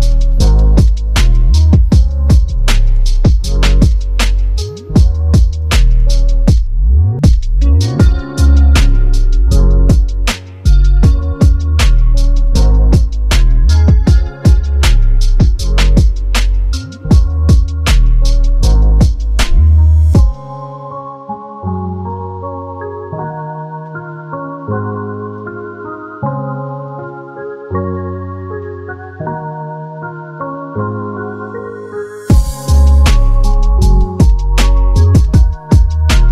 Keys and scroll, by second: 0.7 KP_Subtract, 3.7 space, 6.1 ctrl+shift+g, 8.0-9.5 typing, 11.3 ctrl+j, 14.3 ctrl+t, 26.5 ctrl+KP_Add.